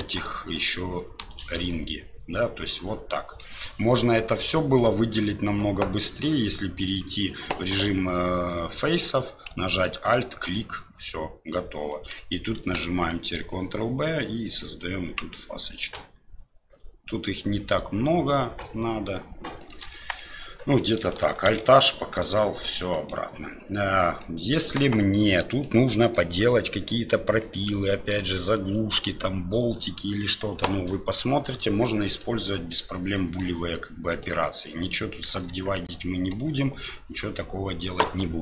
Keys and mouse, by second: 1.2 ctrl+alt+shift+right click, 2.6 middle click, 4.7 right click, 6.8 click, 8.5 middle click, 10.0 alt+right click, 12.6 ctrl+b, 20.0 middle click, 20.0 click, 20.9 click, 21.5 alt+h, 21.8 click, 22.9 click, 24.2 middle click, 25.6 middle click, 27.4 middle click, 30.8 middle click, 32.1 right click, 33.1 middle click, 34.1 right click, 35.3 Tab, 36.3 Tab.